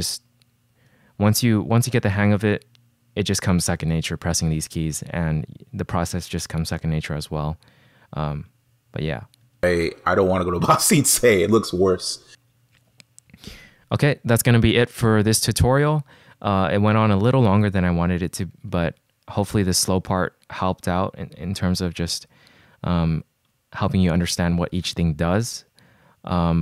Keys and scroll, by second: 9.6 space.